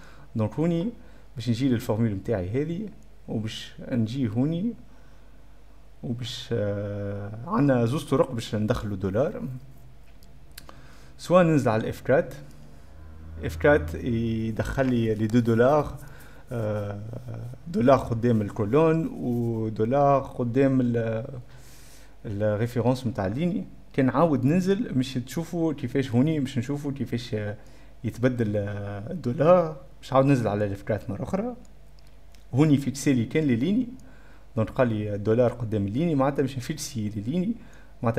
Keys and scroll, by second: 5.6-6.7 typing, 6.8 Caps_Lock, 10.8 b, 12.4 F4, 29.2 F4, 31.0 F4, 32.4 3.